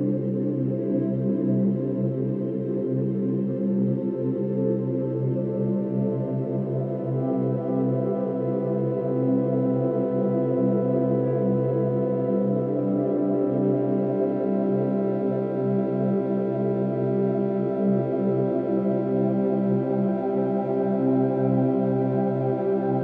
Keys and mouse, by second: 2.9 click, 5.0 ctrl+g, 5.5 ctrl+g, 6.8-8.6 drag, 8.6 ctrl+s, 9.7-10.6 drag, 11.3 click, 14.2 click, 15.5 click, 16.9 Delete, 17.8 1, 19.8 ctrl+alt+0.